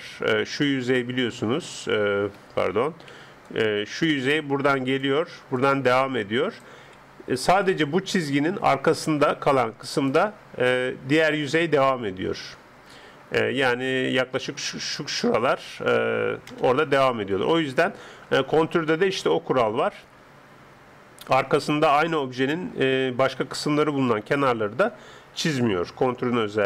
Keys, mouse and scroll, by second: 0.0 s, 3.2-10.2 d, 3.4 click, 5.6 click, 7.6 click, 11.2-12.5 middle drag, 11.2 d, 13.1 middle click, 13.6-15.7 d, 14.0 click, 16.5 KP_0, 18.4-20.8 middle drag.